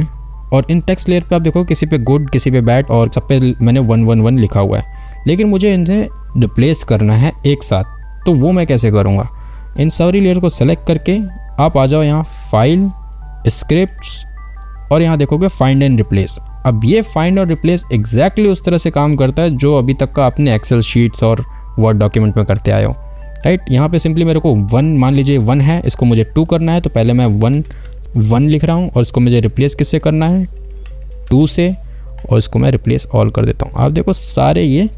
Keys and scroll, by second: 27.8 e, 30.8-32.0 typing.